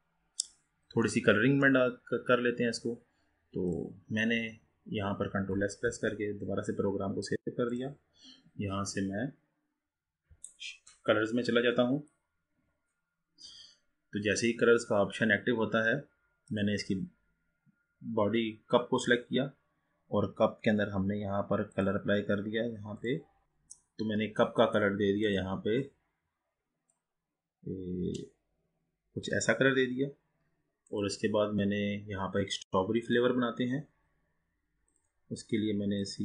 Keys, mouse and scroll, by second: 0.0-1.2 scroll up 8, 1.2-2.2 middle drag, 2.2-3.8 scroll up 2, 3.8 click, 6.0 ctrl+s, 16.5 click, 21.8 click, 23.0-25.6 drag, 31.0 click, 33.0-35.0 drag.